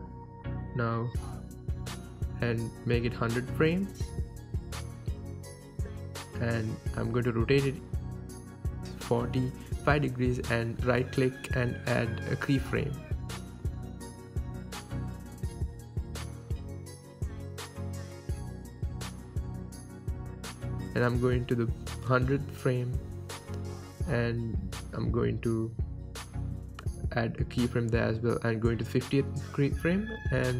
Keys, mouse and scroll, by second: 0.1-1.0 scroll up 2, 1.0 click, 1.7-2.3 middle drag, 2.3-2.9 drag, 2.9 KP_1, 3.7 KP_3, 4.1 n, 5.1 click, 7.0-12.1 drag, 7.9 ctrl+z, 10.9 KP_Enter, 12.1-17.7 right drag, 17.7-22.5 drag, 22.5-25.1 right drag, 25.1-26.4 middle drag, 26.4 click, 28.1-30.5 drag.